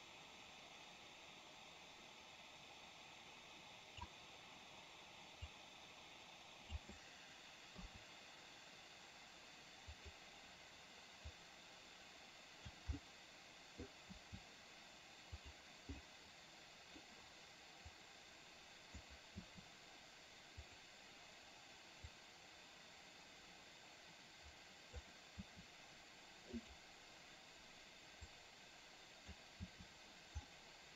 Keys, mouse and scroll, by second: 5.6-6.9 drag, 10.1 click, 11.6-12.9 drag, 13.1-13.9 middle drag, 13.9 scroll down 1, 15.5 click, 16.1-17.1 middle drag, 18.0-19.1 drag, 19.5 i, 20.9 click, 22.2-25.1 drag, 25.5 i, 26.7 click, 28.5-29.5 drag, 29.7 i, 30.6-30.9 middle drag.